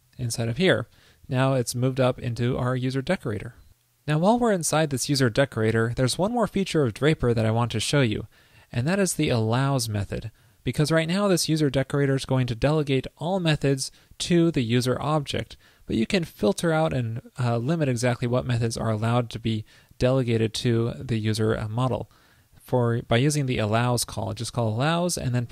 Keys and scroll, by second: 3.2 super+s.